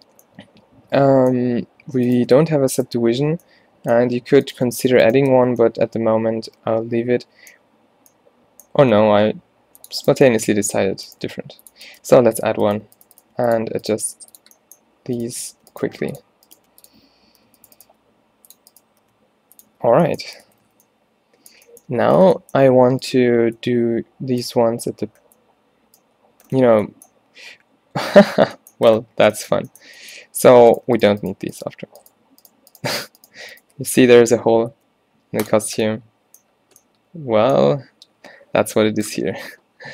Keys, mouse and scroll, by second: 3.3 f, 5.4 f, 9.1 ctrl+r, 11.3-14.1 typing, 15.9 g, 16.6 g, 17.4 g, 17.9 g, 19.1 g, 19.9 Tab, 20.3 Tab, 20.6 a, 20.7 a, 25.8 middle click, 26.3 middle click, 34.8 x.